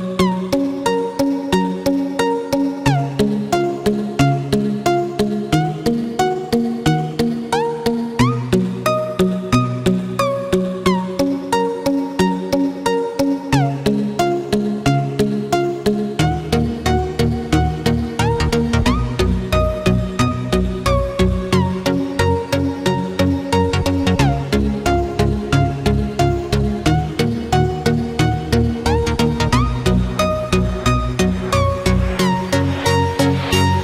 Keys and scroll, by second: 3.8 ctrl+z, 30.9 ctrl+z.